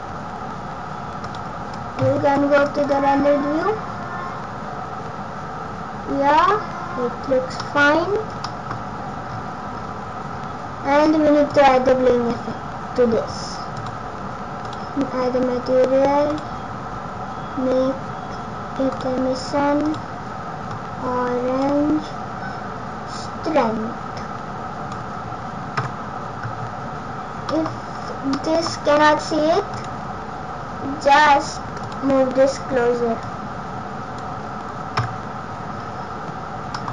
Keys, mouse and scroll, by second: 1.9 z, 6.3-7.0 scroll up 1, 7.0 scroll up 2, 7.6 middle click, 7.6 scroll up 2, 7.9-9.4 scroll down 10, 8.4 middle click, 10.3 scroll down 6, 10.7 scroll down 2, 11.5 click, 13.7 click, 14.6 click, 16.3 click, 19.8 click, 23.2 click, 25.7 KP_0, 27.0-27.4 scroll down 2, 27.4 middle click, 27.7-28.3 scroll down 5, 28.2 scroll up 1, 28.3 middle click, 28.7-29.2 scroll down 4, 29.7 right click, 31.8 click, 33.2 click, 34.9 KP_0, 36.7 middle click.